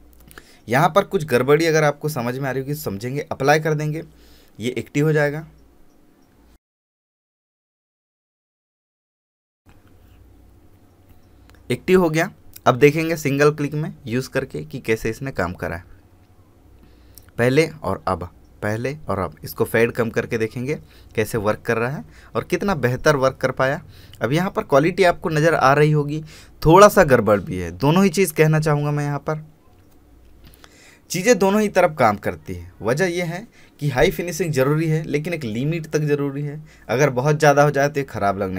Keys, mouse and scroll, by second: 0.0-1.9 scroll down 1, 2.3 click, 4.5-5.3 scroll up 1, 7.8 click, 17.6-19.1 scroll up 1, 20.6 ctrl+alt+click, 28.2 space, 28.4 ctrl+click, 29.8-30.1 alt+scroll down 1, 30.3 click, 30.8 alt+scroll down 1, 31.3 click.